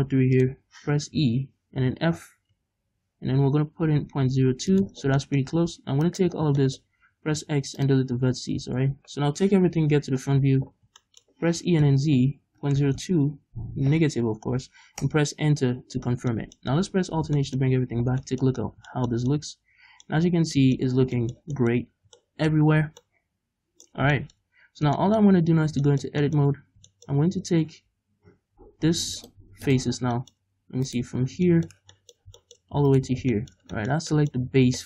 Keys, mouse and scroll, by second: 4.8 shift+click, 5.0-5.5 scroll down 3, 5.5 shift+middle click, 6.0 alt+right click, 6.4 scroll down 2, 6.6 shift+middle click, 7.0 x, 9.2 a, 9.7 KP_1, 10.3-11.0 scroll up 2, 11.1-13.4 middle drag, 11.6 e, 15.1 Return, 16.1-17.2 scroll down 4, 16.3 middle click, 17.2 alt+h, 17.2-29.2 middle drag, 17.7-18.1 scroll up 2, 18.1 Tab, 18.6-18.9 scroll up 2, 20.3-20.6 scroll down 2, 21.0 scroll down 2, 21.8-22.2 scroll up 2, 22.8 scroll down 2, 24.0-24.6 scroll down 3, 24.6-25.0 scroll up 2, 25.5 Tab, 26.5-26.9 scroll up 2, 27.2-28.5 scroll up 2, 28.5-29.2 scroll up 1, 29.2 click, 29.7 click, 30.0 scroll down 2, 30.1 shift+middle click, 30.5-30.9 scroll up 2, 30.9 right click, 31.1-31.5 scroll down 2, 31.5-32.9 shift+middle drag, 32.9 ctrl+right click, 33.2 scroll down 2, 33.4-34.8 shift+middle drag, 34.4-34.8 scroll up 4.